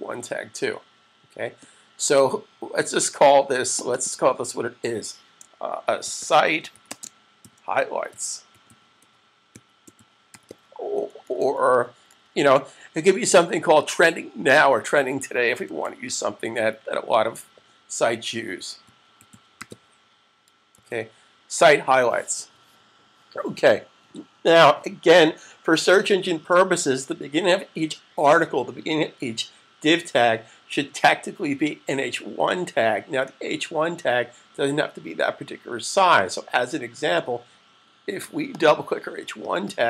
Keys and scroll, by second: 0.2 super+1, 5.6-12.1 typing, 13.2 typing, 14.4-16.1 typing, 18.2-20.0 typing, 20.7 super+s.